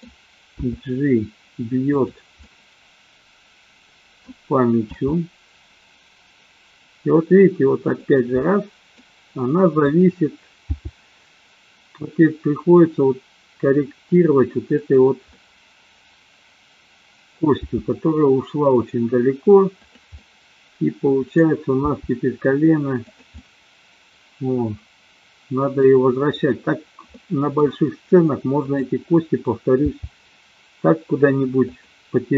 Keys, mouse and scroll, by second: 0.7 g, 2.4-4.2 middle drag, 5.0 g, 8.4 middle click, 9.9 click, 10.9 g, 15.4-17.5 middle drag, 17.7 g, 20.1-21.5 middle drag, 22.0 g, 23.4-25.9 middle drag, 27.2 middle click, 28.6-29.4 drag, 29.9 g.